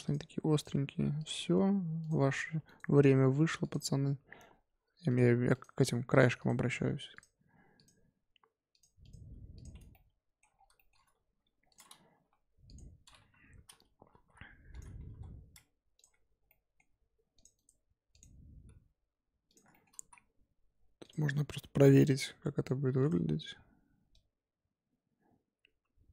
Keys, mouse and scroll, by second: 0.5 click, 0.7 g, 2.0 click, 2.2 g, 3.6 click, 4.0 g, 5.5 click, 5.7 g, 6.3 click, 6.6 g, 7.7 click, 8.0 g, 9.0 click, 9.2 g, 9.7 Tab, 9.9-10.4 middle drag, 10.4 scroll up 1, 10.5 scroll down 3, 10.7 shift+middle drag, 10.9 scroll up 3, 11.2 Tab, 11.7 click, 12.0 g, 13.2 KP_7, 13.9 a, 14.1 s, 14.9 s, 16.0 Tab, 16.4-16.8 middle drag, 16.8-17.3 scroll up 2, 17.3 click, 17.5-19.4 right drag, 19.4 click, 19.7 shift+middle drag, 19.9 z, 21.0-22.2 drag.